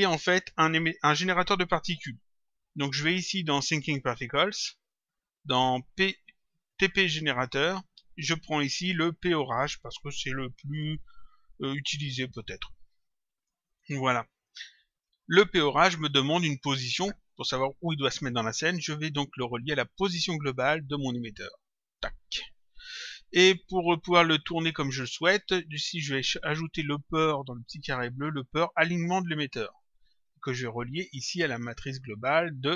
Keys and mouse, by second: 4.4 click, 7.6 click, 9.4 click, 12.5 click, 14.5 click, 20.5 click, 23.7 click, 27.7 click, 29.6 click, 32.0 click.